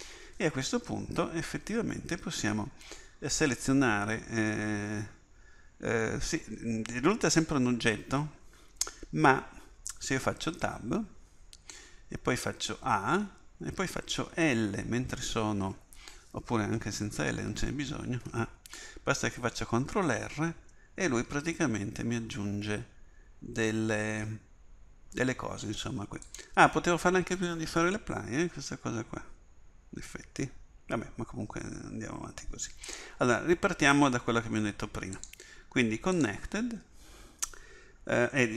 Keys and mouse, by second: 3.4-10.2 drag, 10.2 Tab, 12.4 a, 14.4 l, 17.1 l, 18.3 a, 20.5 ctrl+r, 35.2-38.5 drag.